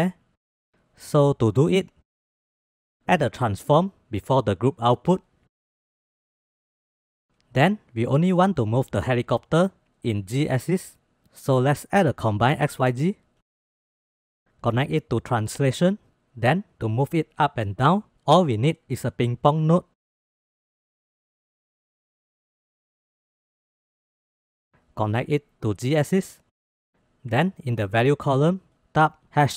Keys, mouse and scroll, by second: 1.3 middle click, 1.8 middle click, 2.2 click, 2.7 shift+a, 6.4 drag, 7.1 middle click, 11.4 shift+a, 15.1-15.9 drag, 17.3 shift+a, 20.6-21.1 drag, 21.3-21.6 drag, 22.4 drag, 23.9 click, 24.8-26.6 drag, 28.4-29.5 drag.